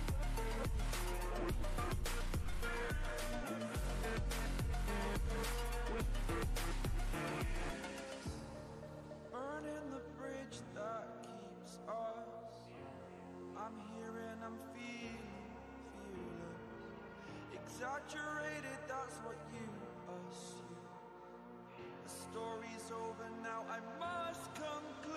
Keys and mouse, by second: 5.5 click, 8.9-25.1 drag, 12.7-13.5 typing.